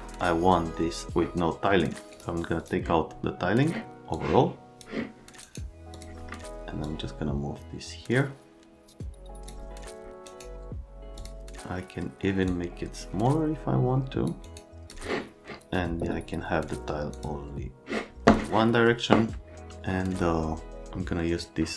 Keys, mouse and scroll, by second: 2.1 click, 2.6 click, 4.1 click, 5.4 right click, 5.9 click, 6.8 click, 10.2 middle click, 11.2 click, 12.5 click, 14.4 middle click, 14.7 click, 17.1 click.